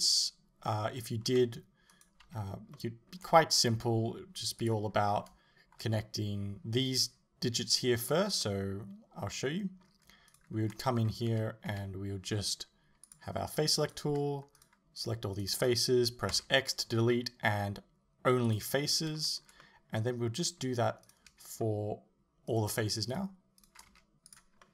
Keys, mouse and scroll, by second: 2.0 right click, 2.3 Tab, 2.8-4.6 middle drag, 4.6 click, 5.0-6.0 scroll up 1, 6.0-11.1 middle drag, 11.1 scroll down 1, 11.3 a, 13.1 click, 13.9 right click, 14.6 shift+right click, 15.0 shift+right click, 15.4 shift+right click, 18.6 x, 19.2-21.1 shift+middle drag, 21.1 right click, 22.5 shift+right click, 23.1 shift+right click, 23.6 shift+right click, 24.4 x, 24.6 middle click.